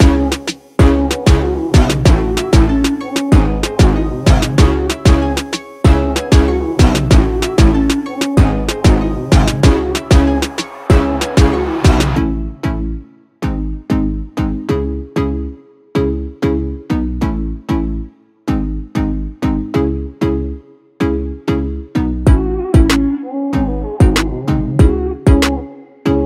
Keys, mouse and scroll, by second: 0.0-1.3 typing, 1.4 ctrl+Return, 3.2-8.9 drag, 14.1-20.2 drag, 20.2-26.1 drag.